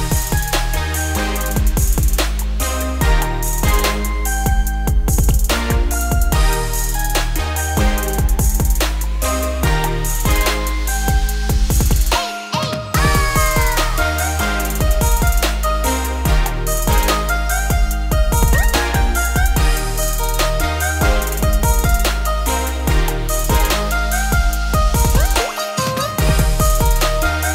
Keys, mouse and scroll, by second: 1.1 `, 3.0-3.4 scroll up 1, 3.4 shift+middle drag, 3.7-4.3 shift+scroll up 4, 4.3 click, 4.8-8.0 scroll down 3, 9.4-9.9 scroll down 2, 9.9-11.5 scroll up 3, 11.5-12.1 scroll down 1, 12.1-12.4 shift+middle drag, 12.4-12.9 scroll up 4, 12.9 shift+middle drag, 13.0-14.0 scroll up 7, 14.0 click, 14.7 click, 15.0-15.5 scroll down 4, 15.5 q, 16.9-18.2 drag, 18.2-18.6 scroll up 5, 18.6 Tab, 19.7 ctrl+r, 21.1 alt+click, 21.9-22.9 shift+middle drag, 22.9-23.2 scroll up 1, 23.2 shift+d, 24.5 p, 25.1 Tab, 25.5 click, 25.8 z, 26.5 click.